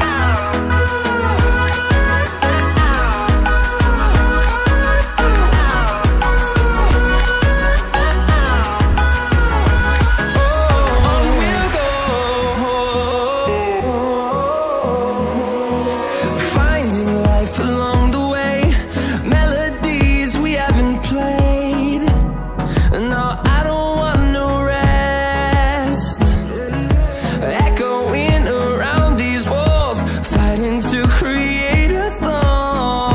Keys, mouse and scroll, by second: 4.4 double click, 5.6 click, 7.2 Up, 7.5 Up, 9.0 click, 13.9 ctrl+z, 14.0 ctrl+click, 15.3 ctrl+z, 16.2 ctrl+shift+z, 18.2 click, 18.6 scroll up 1, 19.3 click, 19.8 scroll down 1, 21.1 click, 22.4 scroll down 1, 22.8 scroll up 1, 23.7 click, 24.4 scroll up 1, 26.1 click, 28.2 double click, 28.7 click.